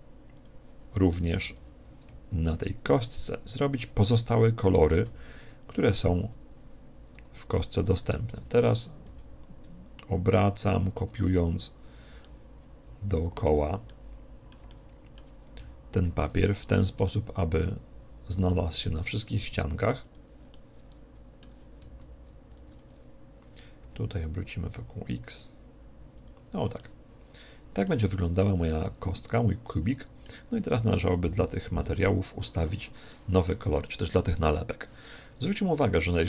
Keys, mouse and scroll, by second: 0.4 click, 3.7 click, 4.8 shift+d, 11.7 click, 12.3-19.2 middle drag, 16.1 shift+d, 20.1 click, 20.5-22.4 middle drag, 22.0 shift+d, 26.2 click, 26.8-29.8 middle drag, 31.1 KP_1, 33.1-34.7 middle drag, 36.1 right click.